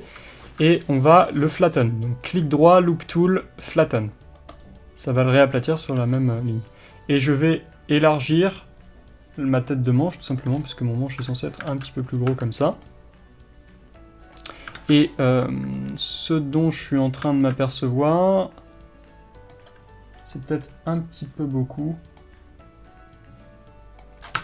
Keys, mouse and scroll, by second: 4.7-10.6 right drag, 6.0 g, 10.6-11.3 scroll down 1, 11.3 Tab, 11.7 alt+z, 12.2 scroll up 1, 12.3 Tab, 12.8 scroll up 1, 12.9-24.4 middle drag, 14.6 scroll up 1, 14.8 alt+a, 16.8-17.3 scroll down 1, 20.7-21.9 scroll up 1, 24.3 scroll down 1.